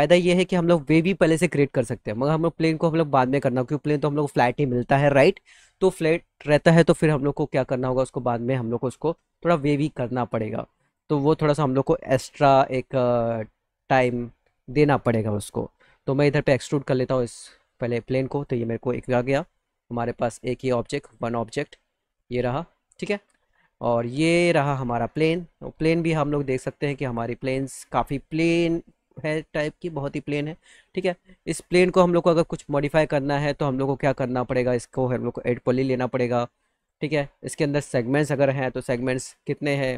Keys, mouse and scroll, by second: 0.2 middle click, 2.0 click, 7.9 click, 10.7 click, 11.2 click, 12.2 e, 16.2 click, 17.5 click, 19.8 alt+middle click, 21.0-22.2 drag, 22.5 alt+middle click, 23.5 middle click, 24.1 click, 24.8 alt+middle click, 25.5 middle click, 26.5-27.6 drag, 27.8-29.4 alt+middle drag, 30.0-31.2 middle drag, 31.3 alt+middle click, 34.4 click, 35.5 e, 36.6 click, 37.6 click, 39.5 alt+middle click.